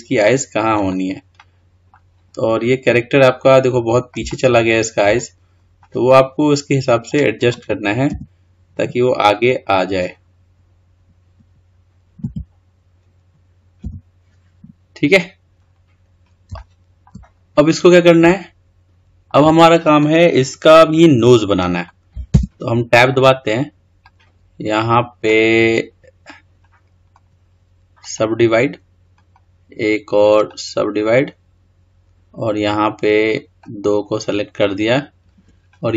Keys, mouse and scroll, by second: 1.2-2.1 middle drag, 2.1 scroll down 4, 4.2-5.2 shift+middle drag, 5.2 scroll down 2, 5.7-7.9 middle drag, 7.9 g, 14.4 click, 15.4-15.9 scroll up 4, 15.9 scroll down 1, 16.4-17.1 shift+middle drag, 17.1 scroll up 4, 17.5 scroll down 2, 18.1-21.1 shift+middle drag, 21.5 click, 22.1 Tab, 26.1 click, 28.0-29.2 right drag, 30.3-32.5 right drag, 32.5 click, 33.9-34.5 scroll up 4, 34.5-35.9 scroll down 3.